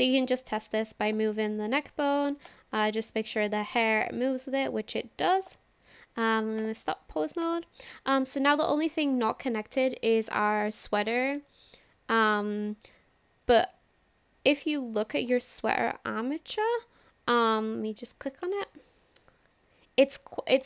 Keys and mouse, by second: 1.1-1.7 drag, 2.5-5.7 drag, 6.6 click, 7.4 click, 10.3 click, 11.8 click, 14.9 click, 16.6 click, 18.2 click, 18.7 click, 19.4 click.